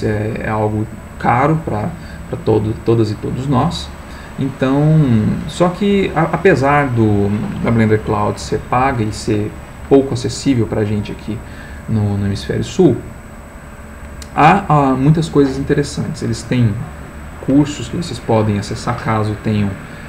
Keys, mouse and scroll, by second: 3.8-4.4 scroll up 1, 4.6-5.2 scroll up 1, 5.9-6.3 scroll up 1.